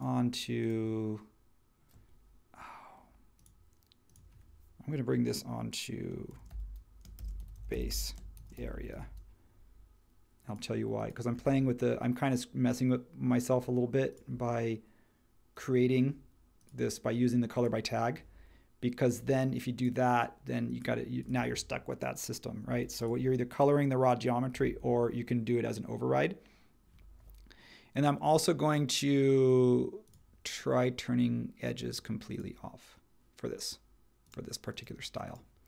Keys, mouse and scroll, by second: 6.0-9.4 typing, 24.6 super+1.